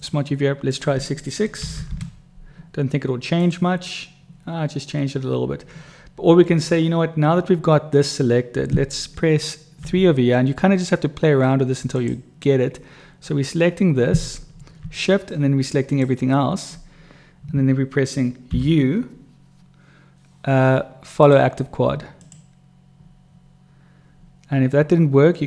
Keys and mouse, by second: 1.7 6, 9.9 3, 11.9 click, 15.4 shift+click, 18.5 u.